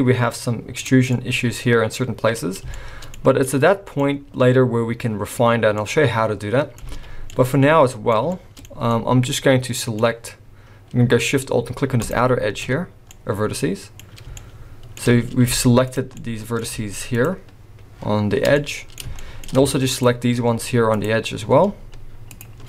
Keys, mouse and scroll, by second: 0.8 scroll down 3, 1.1 middle click, 2.5 scroll down 1, 2.7 shift+middle click, 3.5 middle click, 6.8 alt+a, 7.3 middle click, 8.3 shift+middle click, 8.8 scroll up 1, 8.9 middle click, 12.0 alt+shift+click, 12.9 scroll down 1, 13.1 middle click, 14.3 shift+middle click, 15.5 z, 16.1 scroll up 1, 16.2 middle click, 17.1 shift+click, 18.4 shift+scroll down 3, 18.6 middle click, 19.2 shift+middle click, 19.9 shift+click, 20.9 shift+click, 22.3 ctrl+shift+click.